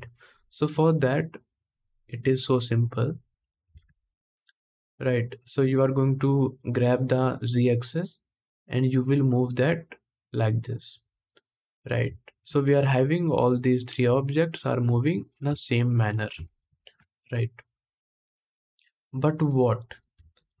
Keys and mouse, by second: 1.0-2.8 drag, 2.8-4.2 middle drag, 3.5 ctrl+z, 4.2-20.6 drag.